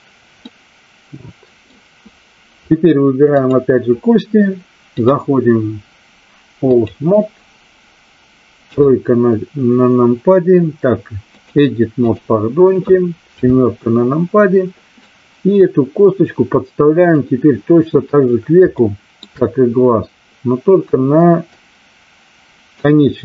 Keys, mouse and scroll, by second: 0.4-1.6 middle drag, 3.3 click, 4.8-6.9 drag, 8.5 KP_3, 11.3-12.3 drag, 13.3 KP_7, 15.0-17.2 drag, 18.6 shift+middle click, 21.6-22.8 drag.